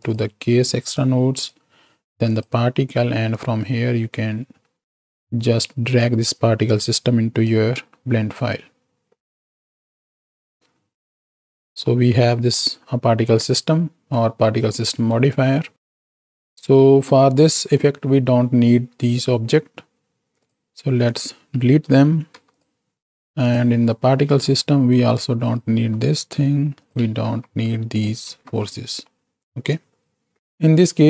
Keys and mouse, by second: 10.4-11.4 drag, 11.7 middle click, 13.8 middle click, 15.1 middle click, 17.3 middle click, 21.0 ctrl+click, 22.3 x, 24.3 click, 25.2 click, 26.0 x, 27.5 ctrl+x, 27.9 click, 28.4 ctrl+x, 29.1-30.3 drag, 30.4 ctrl+space, 30.4 x.